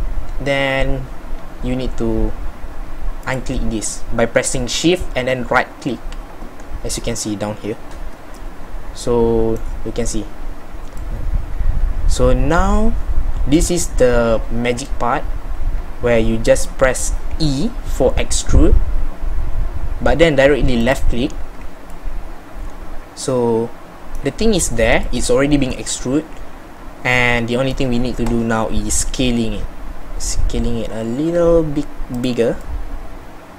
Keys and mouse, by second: 17.3 e, 28.9 s.